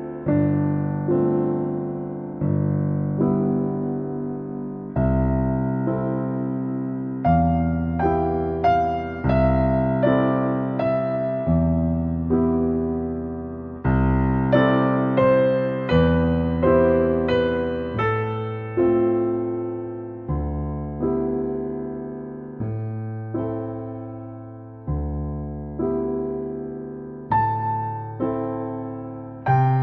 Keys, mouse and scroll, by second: 0.1 click, 0.2 g, 0.9 middle click, 1.3 g, 2.0 middle click, 2.6 click, 2.8 middle click, 3.1 g, 3.8 middle click, 4.2 click, 4.5 g, 5.3 middle click, 6.1 click, 6.5 middle click, 6.8 scroll down 2, 7.0 shift+middle click, 7.5 shift+a, 8.1 scroll down 1, 8.3 middle click, 8.5 s, 9.7 scroll up 1, 9.9 shift+middle click, 10.4 ctrl+s, 10.5 scroll up 2, 10.6-12.1 shift+middle drag, 12.1 ctrl+s, 12.3 middle click, 13.2-13.6 scroll up 3, 13.6 ctrl+s, 13.8 scroll down 1, 14.0 middle click, 14.3 ctrl+s, 14.8 click, 15.8 middle click, 16.6 scroll up 1, 16.9-21.7 shift+middle drag, 21.7 click, 23.3 shift+middle click, 24.2-26.0 drag, 26.3 scroll up 1, 26.4 middle click, 26.9 click, 27.4 click, 27.8 scroll down 2, 27.9 middle click, 28.8 click, 29.6 click.